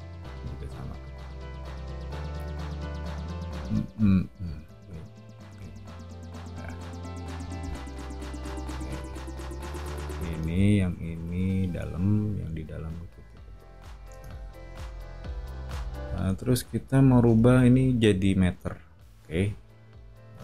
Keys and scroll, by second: 7.2 o, 10.4 Escape, 14.1 space, 15.6 o, 20.3 space.